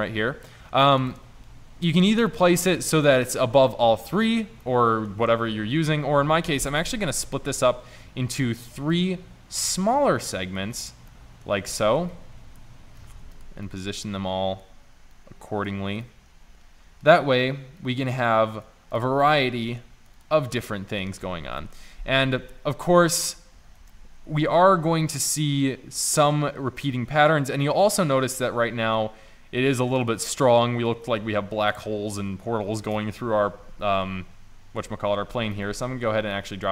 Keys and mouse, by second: 1.4 shift+z, 4.7 middle click, 6.6 s, 9.0-11.2 drag, 11.2 middle click, 11.7 shift+d, 13.3 shift+d, 16.0 click, 19.0 click, 20.7 middle click, 21.6 KP_0, 22.2-22.7 middle drag, 24.3 shift+z, 29.0 drag.